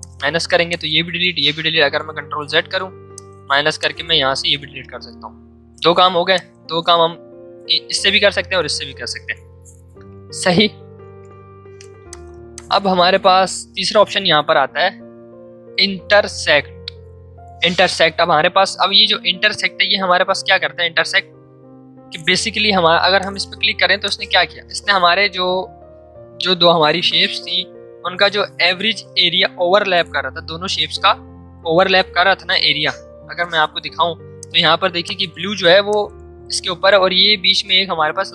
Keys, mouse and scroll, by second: 1.6 ctrl+z, 3.2 alt+click, 4.9 ctrl+z, 6.0 v, 6.3 click, 9.8 click, 9.9 ctrl+z, 10.8 ctrl+shift+z, 11.6 ctrl+shift+z, 12.0 shift+click, 23.2-27.5 shift+drag, 33.2 shift+click, 33.5 ctrl+shift+z, 34.4 click.